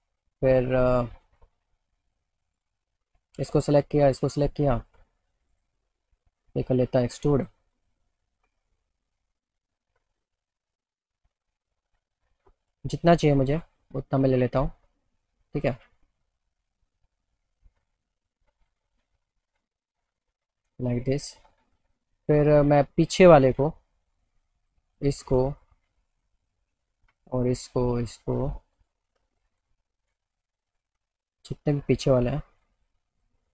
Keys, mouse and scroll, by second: 0.6 click, 3.2 click, 4.1 ctrl+click, 4.4 alt+middle click, 7.4 click, 10.5-13.7 drag, 16.6-18.9 alt+middle drag, 20.1 click, 21.1 alt+middle click, 22.4 click, 22.9 alt+middle click, 24.3 ctrl+click, 24.9 alt+middle click, 26.1 middle click, 27.3 ctrl+click, 28.1 ctrl+click, 28.4 middle click, 29.4 ctrl+click, 29.7 alt+middle click, 30.7 ctrl+click, 32.8 ctrl+click, 33.2 ctrl+click.